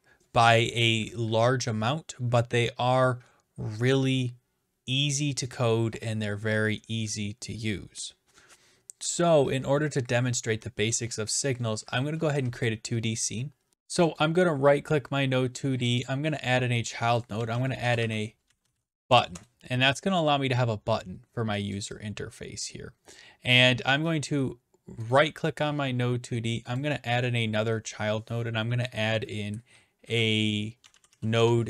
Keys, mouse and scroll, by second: 12.7 click, 14.2 right click, 16.0 click, 17.1-19.2 typing, 19.3 Return, 21.7-22.9 drag, 23.1-24.2 drag, 25.1-26.2 right drag, 26.8-27.8 drag, 30.0-31.6 typing.